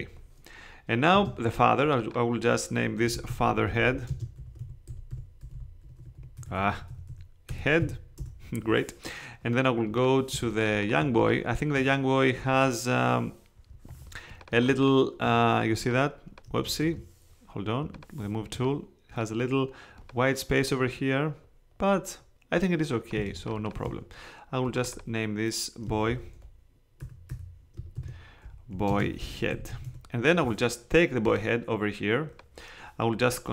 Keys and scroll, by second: 1.1 space, 2.8-6.4 typing, 7.8 d, 8.2 Return, 10.3 space, 13.9 space, 16.8 super+z, 23.1 space, 23.8 super+space, 26.1-30.2 typing.